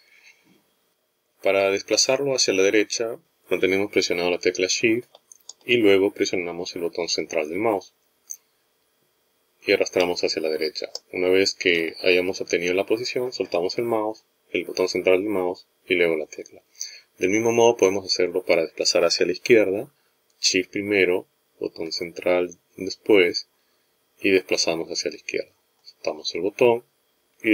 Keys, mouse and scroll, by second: 8.3 shift+middle click, 22.2 shift+middle click.